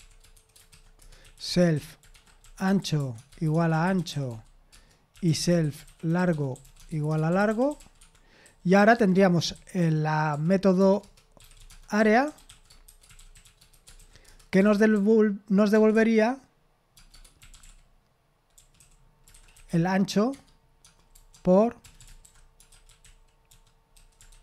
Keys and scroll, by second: 0.0-15.4 typing.